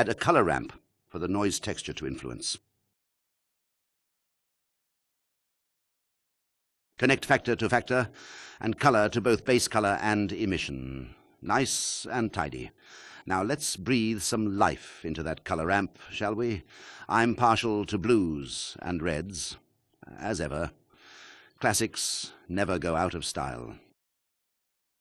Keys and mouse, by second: 2.4 click, 3.3 shift+a, 6.5 click, 7.1-8.5 drag, 10.3 click, 21.9 click, 22.5 click, 24.3 click, 24.5-24.9 ctrl+drag.